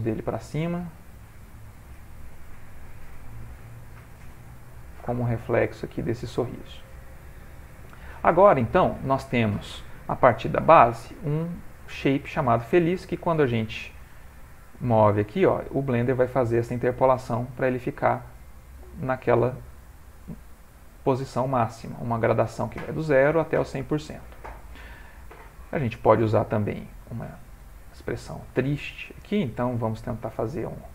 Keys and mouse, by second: 0.5 a, 0.9 a, 1.0 a, 1.4 c, 4.3 g, 6.9 Tab, 12.0 click, 19.5 click, 26.7 click, 27.7 ctrl+middle click, 28.5 shift+middle click, 29.3 ctrl+middle click, 30.2 Tab, 30.7 ctrl+middle click.